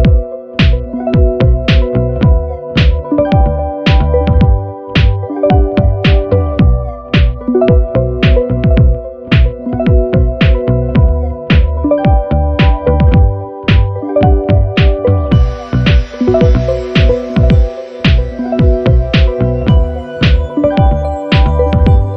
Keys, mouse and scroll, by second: 0.2 click, 1.0-2.4 drag, 2.9 click, 3.8 click, 5.0-6.4 drag, 6.9 click, 8.0 click, 9.3-10.7 drag, 11.6 click, 12.7 click, 14.6 click, 15.2 click, 15.6-16.1 ctrl+scroll down 4, 16.7 KP_5, 19.9 click, 20.7 ctrl+scroll up 2.